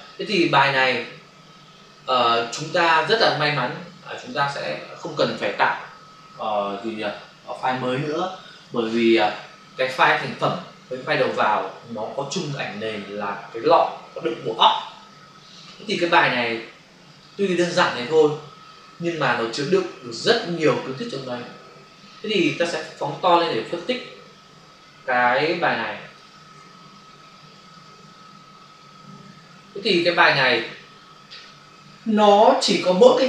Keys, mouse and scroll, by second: 4.3 click, 4.4 click, 17.0 click, 17.2 click, 23.8 ctrl+space, 26.5 space.